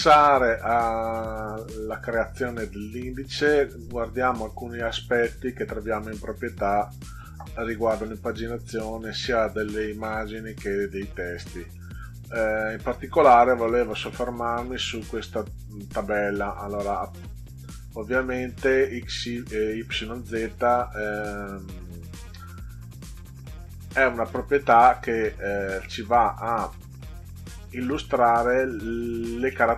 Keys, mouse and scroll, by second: 5.2-6.4 drag, 13.0 click, 13.8 click, 21.1 click.